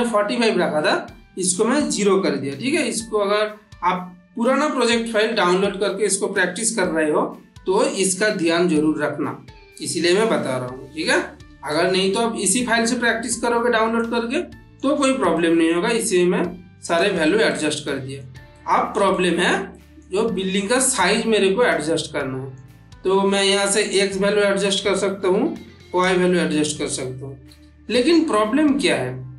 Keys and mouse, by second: 11.6-13.4 middle drag, 14.2-14.8 middle drag, 18.4-19.3 ctrl+middle click, 20.2-20.8 ctrl+middle click, 21.4-22.5 middle drag, 23.8-24.7 click, 25.0 ctrl+z, 25.9-26.8 drag, 27.4 ctrl+z, 28.2-28.8 middle drag.